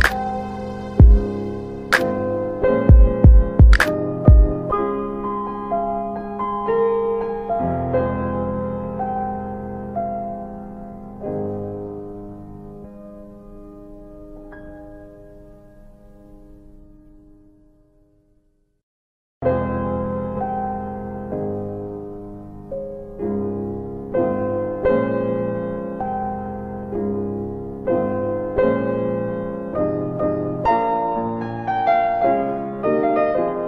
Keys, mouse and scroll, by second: 0.7 m, 2.6 click, 3.4 alt+w, 5.2 click, 8.1 double click, 8.5 alt+w, 8.9 alt+w, 9.6 middle click, 9.6-10.1 scroll down 2, 9.9 F3, 10.8 alt+w, 11.6 middle click, 11.6 scroll down 1, 13.3 w, 16.0 click, 17.7 right click, 21.2 middle click, 22.2 right click, 23.6 click, 24.5 middle click, 24.9 alt+w, 25.1 alt+w, 25.8 alt+middle click, 26.0-26.3 scroll down 3, 26.8 alt+middle click, 27.7 alt+w, 28.0 alt+w, 28.4 middle click, 28.4 scroll down 2, 30.6 click, 32.7 z.